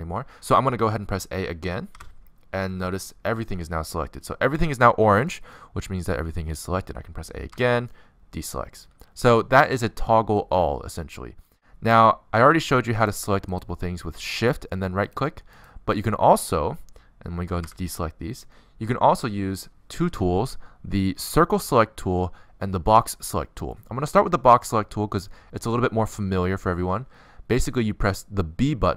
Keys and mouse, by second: 2.1 a, 5.1-7.0 middle drag, 7.2 middle click, 8.2 a, 8.4-10.6 middle drag, 11.4 middle click, 14.3-20.7 right drag, 17.6 a, 22.0 c, 23.0-25.2 right drag, 23.8 b, 28.6 b.